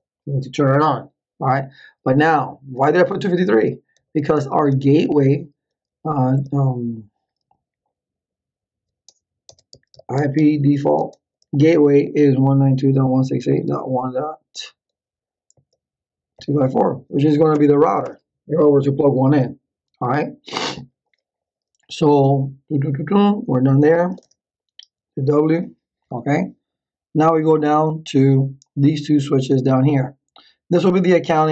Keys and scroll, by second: 3.5-5.0 typing, 6.3 d, 9.4-14.4 typing, 15.6-17.2 typing, 17.5 Return, 23.5-24.7 typing.